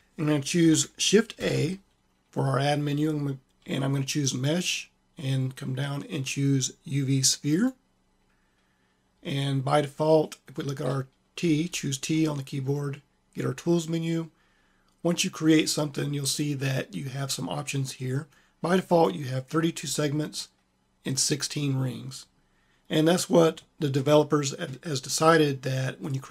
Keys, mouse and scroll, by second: 1.3 shift+a, 11.4 t, 18.2-20.2 drag, 26.2-26.3 drag.